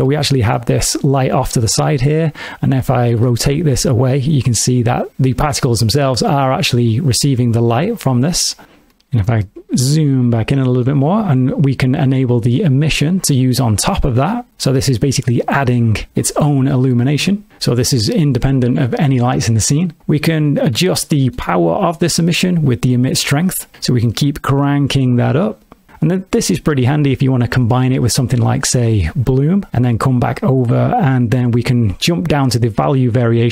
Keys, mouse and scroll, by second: 0.1 alt+shift+z, 0.6 middle click, 3.1 r, 3.3 r, 7.5 right click, 8.4 middle click, 8.6 alt+shift+z, 8.9 middle click, 9.5 ctrl+middle click, 12.8 click, 20.7 middle click, 22.9 click, 27.1 click, 28.8 click, 29.3 click, 30.3 click.